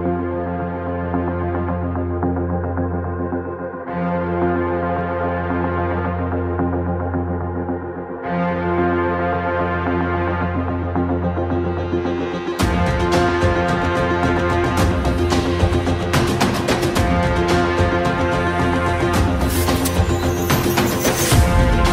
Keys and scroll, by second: 1.8 ctrl+space, 4.2 1.